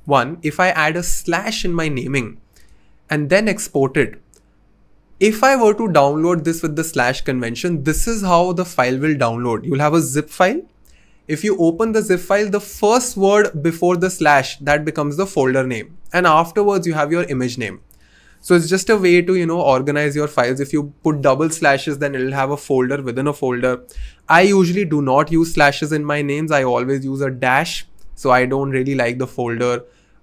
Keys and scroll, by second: 0.0-0.4 typing, 18.9 BackSpace.